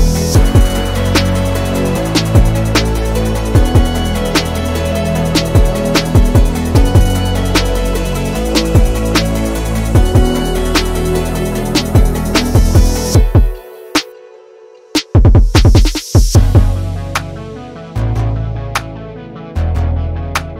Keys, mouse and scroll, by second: 0.8 click, 1.5 s, 3.2 KP_1, 4.4-5.0 shift+middle drag, 5.0-5.7 scroll up 6, 6.3 click, 8.3 click, 9.1 scroll down 3, 9.4-11.6 middle drag, 11.6-12.0 scroll down 11, 12.0-12.6 middle drag, 12.6 scroll down 1, 12.8-14.9 middle drag, 14.9-17.3 scroll up 2, 18.0 KP_1, 18.5-19.7 scroll up 1, 19.7 click, 20.4 Tab.